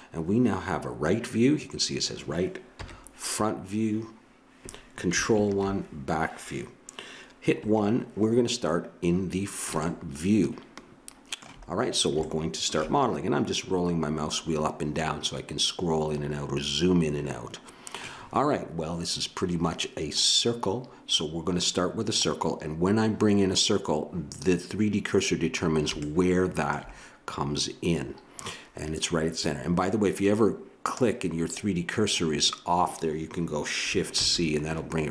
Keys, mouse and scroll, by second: 2.7 KP_1, 5.3 ctrl+KP_1, 7.6 KP_1, 9.8 middle click, 11.0 middle click, 11.2 middle click, 26.0-29.0 middle drag, 30.8-34.1 right drag, 34.1 shift+c.